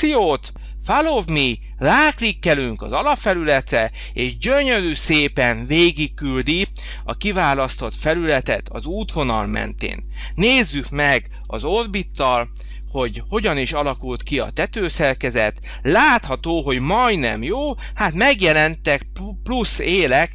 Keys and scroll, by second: 11.3 o.